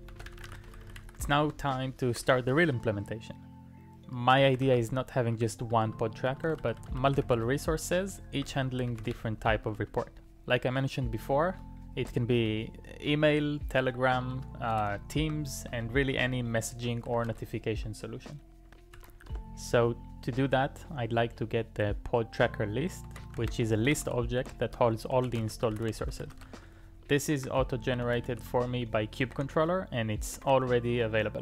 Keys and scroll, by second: 0.0-2.3 typing, 1.6 Return, 4.2-9.7 typing, 9.8 ctrl+u, 11.5 ctrl+u, 12.4 ctrl+u, 14.1-17.8 typing, 19.0 o, 19.3 Return, 22.8-28.9 typing, 29.3 shift+Tab, 29.5 shift+Tab, 30.4 Tab, 30.5 Tab.